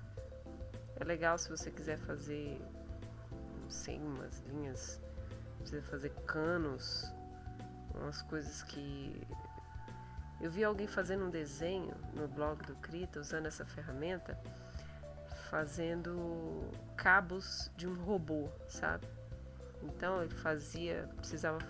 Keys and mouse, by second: 0.8 middle click, 1.7-5.5 drag, 6.6 click, 7.8 click, 8.8 click, 9.7 click, 10.4 middle click, 11.9 ctrl+middle click, 12.8 ctrl+middle click, 15.4 click, 18.8-20.6 drag, 21.4 ctrl+z.